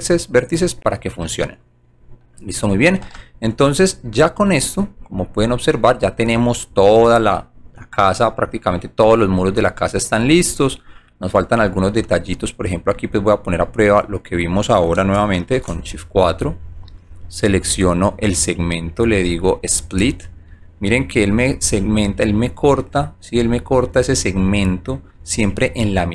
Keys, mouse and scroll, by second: 1.2 middle click, 3.5 alt+right click, 4.9 alt+click, 5.3 scroll down 1, 6.2 right click, 7.0 alt+right click, 7.6 alt+middle click, 8.1 alt+click, 9.2 alt+middle click, 10.7 alt+middle click, 11.6 alt+right click, 12.0 alt+middle click, 12.6 alt+right click, 13.2 alt+middle click, 13.8 alt+right click, 17.6 shift+click, 19.4 click, 20.5-21.2 alt+middle drag, 21.6 alt+click, 22.5 alt+right click, 23.6-25.0 alt+middle drag, 25.4 alt+right click.